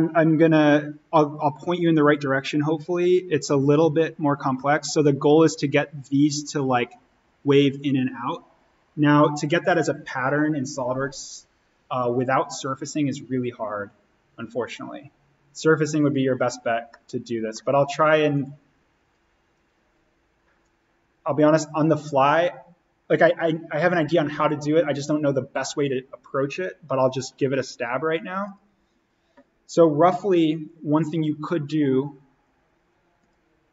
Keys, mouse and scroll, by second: 2.9 click, 4.4 scroll down 1, 4.5-6.2 middle drag, 6.2 click, 16.8 middle click, 16.9 scroll, 18.3 click, 28.4 click, 33.1 click.